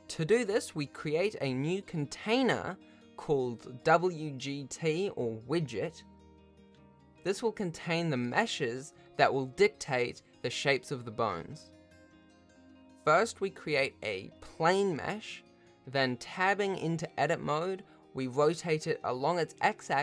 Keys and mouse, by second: 0.6 KP_1, 1.2 ctrl+s, 2.0 click, 3.1 click, 4.2 click, 12.5 shift+a, 14.3 Tab, 14.8 r, 18.7 Tab, 18.9 F2.